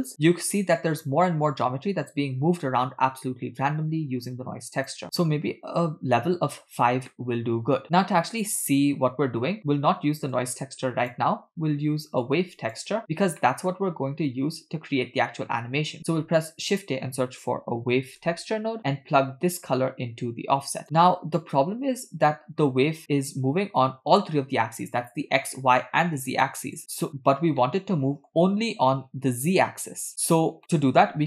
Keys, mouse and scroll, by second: 4.8 click, 7.1 middle click, 10.4 click, 12.3-13.0 drag, 13.4 middle click, 16.0 shift+a, 19.7-20.8 drag, 21.0-21.4 scroll down 3, 21.4-23.3 middle drag, 25.9-26.4 scroll down 1, 26.4 scroll down 1, 26.5 click, 27.7-28.4 middle drag, 30.5 scroll up 3, 30.6 middle click, 31.1 shift+a.